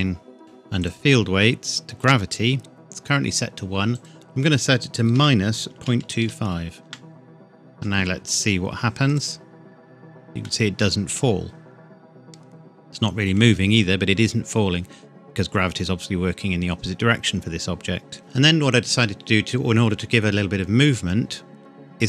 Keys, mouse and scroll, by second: 0.8 click, 1.2-3.3 scroll down 1, 3.9 click, 5.1 KP_Subtract, 5.7 KP_Decimal, 6.0 KP_2, 6.2 KP_5, 6.8 KP_Enter, 9.0 click, 10.4 middle click, 18.2 scroll up 1.